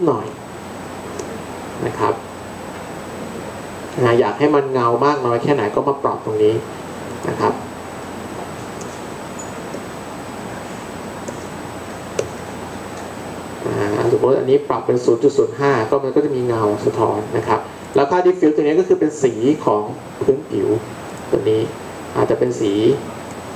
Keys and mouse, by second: 8.5-12.2 drag, 20.0-22.5 drag.